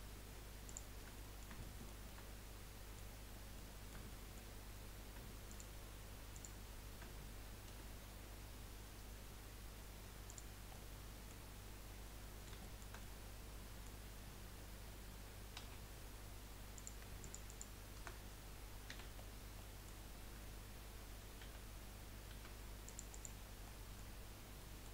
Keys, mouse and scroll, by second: 0.6 shift+click, 1.1-3.2 middle drag, 3.2-3.5 scroll down 3, 3.5 middle click, 4.5-5.5 scroll up 5, 5.5 shift+click, 6.3 shift+click, 7.7 Delete, 10.7 middle click, 11.5-12.2 scroll down 4, 12.2-15.6 middle drag, 15.6 2, 15.9-16.5 scroll up 3, 16.7 click, 17.2 alt+shift+click, 17.4 alt+shift+click, 18.9 f, 19.2-19.6 scroll down 4, 19.6-21.4 middle drag, 21.4 a, 22.3 a, 22.8 click, 23.1 click, 23.6 middle click, 24.2-24.5 scroll down 1, 24.5 middle click.